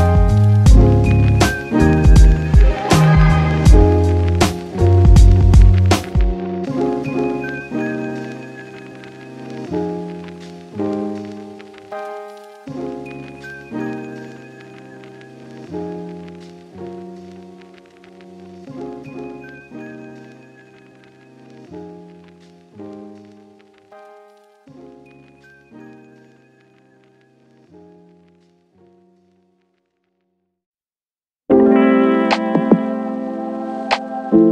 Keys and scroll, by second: 4.6 Delete, 7.6-8.4 typing, 10.6-12.6 typing, 13.9 k, 14.9 j, 16.5 v, 30.5 ctrl+1, 33.7 Return.